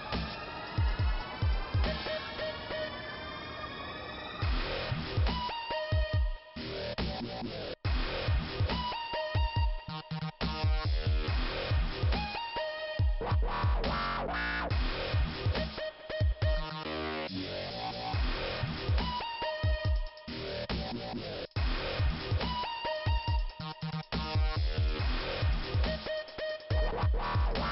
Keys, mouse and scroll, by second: 0.7 scroll down 2, 3.5 scroll up 2, 3.8 scroll down 1, 3.9 scroll up 1, 4.0 scroll down 2, 4.2 scroll up 1, 4.3 scroll down 1, 10.3 scroll up 2, 11.6 click, 14.7 click, 17.9 click, 18.9 click, 19.3 click, 19.4 double click, 20.0 double click, 21.0 click, 21.5 click, 22.3 click, 24.0 click, 24.4 click.